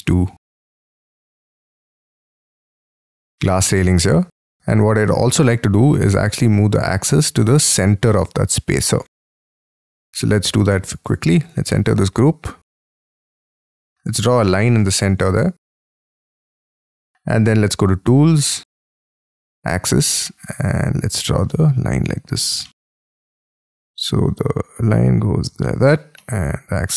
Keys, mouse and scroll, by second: 0.1-0.6 scroll down 5, 0.6 scroll up 1, 0.8 middle click, 1.1-2.0 scroll down 24, 2.2-3.7 scroll up 17, 3.7 middle click, 6.6-8.1 scroll up 4, 8.1 middle click, 8.4-9.5 scroll down 28, 9.5 Escape, 9.6-11.1 scroll up 18, 11.1 double click, 11.2 double click, 11.4 double click, 11.7 middle click, 12.5 scroll up 6, 12.7 middle click, 13.7-14.1 scroll up 4, 14.1 k, 14.8 k, 22.7 middle click, 26.2 middle click.